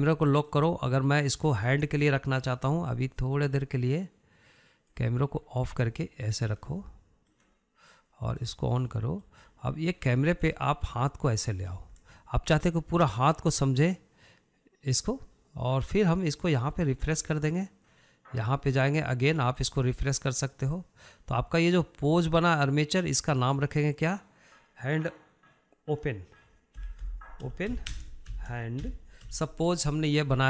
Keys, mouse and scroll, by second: 0.8 click, 1.2-1.8 scroll down 4, 1.8-2.9 shift+middle drag, 2.9-3.6 scroll up 3, 3.1 shift+middle drag, 3.6-4.2 scroll down 4, 4.2-6.4 middle drag, 6.4 click, 6.8-7.6 scroll down 3, 7.6-8.1 scroll down 1, 8.1-9.8 shift+middle drag, 9.8 click, 10.3-10.9 middle drag, 10.9-12.0 scroll up 10, 12.0-13.5 shift+middle drag, 13.5 scroll down 1, 13.7-16.7 shift+middle drag, 17.9-30.4 drag.